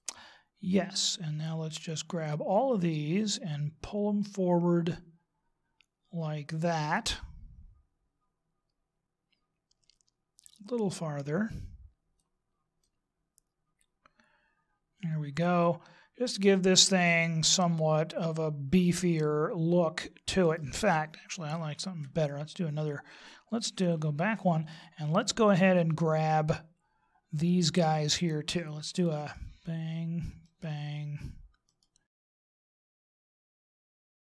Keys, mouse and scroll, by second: 2.7 click, 12.8 middle click, 21.7 ctrl+z, 23.9 ctrl+z, 29.1 shift+right click, 30.4 shift+right click, 31.7 shift+right click, 32.1 shift+right click, 32.3 shift+right click, 32.6 shift+right click, 32.8 shift+right click, 33.1 shift+right click, 33.2 middle click, 33.6 shift+right click, 33.8 shift+right click, 33.9 middle click.